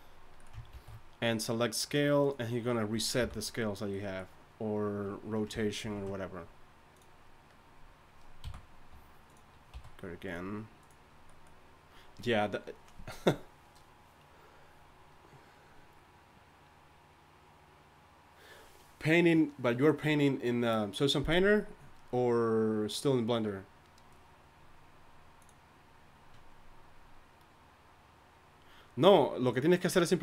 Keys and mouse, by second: 0.7 ctrl+a, 3.2 n, 7.0 ctrl+s, 8.4 n, 9.7 a.